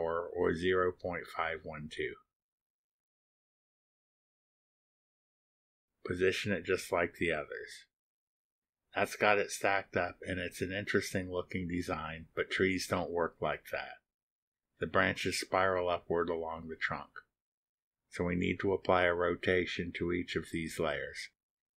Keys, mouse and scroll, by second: 0.0 Return, 0.4 click, 1.0 click, 1.1-2.0 typing, 2.2 Return, 2.9 click, 3.2 click, 3.7 click, 3.8-4.8 typing, 4.9 Return, 5.6 click, 7.3 click, 8.1 click, 9.1-11.0 drag, 11.9 click, 14.3 g, 14.8 r, 15.8-18.2 drag, 19.1 8, 19.8-21.4 drag.